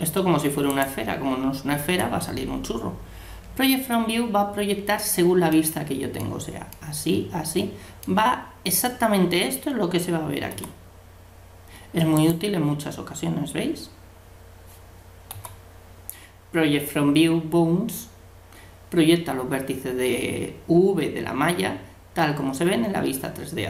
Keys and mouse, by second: 1.8 u, 5.5-7.6 middle drag, 10.5 u, 15.3 u.